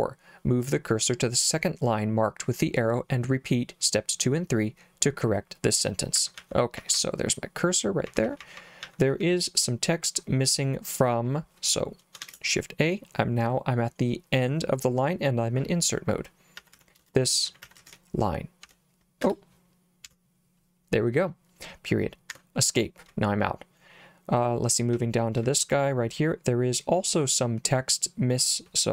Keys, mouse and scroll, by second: 5.9-9.7 typing, 12.2 shift+a, 16.4-20.1 typing, 22.4 Escape, 25.0 j, 25.4 j.